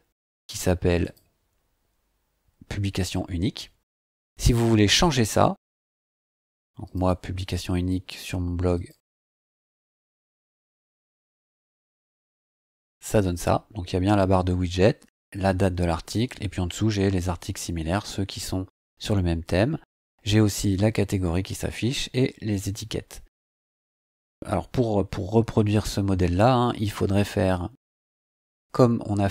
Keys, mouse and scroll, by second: 1.0 click, 6.8 click, 8.7 click, 9.9 click, 14.5 scroll down 2, 16.2 scroll down 2, 17.8 scroll down 2, 19.6-23.2 scroll down 2, 23.2 scroll down 1, 24.0 scroll down 2, 24.6-25.8 scroll up 5.